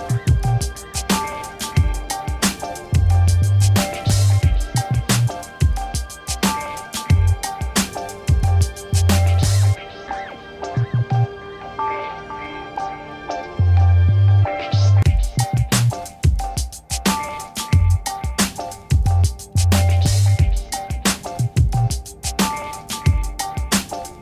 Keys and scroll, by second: 1.5 c, 1.7 l, 2.5 u, 2.8 b, 3.8 space, 4.3 b, 4.7 o, 5.1 x, 7.3 l, 7.4 e, 7.6 f, 7.8 t, 8.4 Return, 10.8 space, 11.1 Return, 17.8 5, 18.0 7, 18.4 0, 18.7 Return.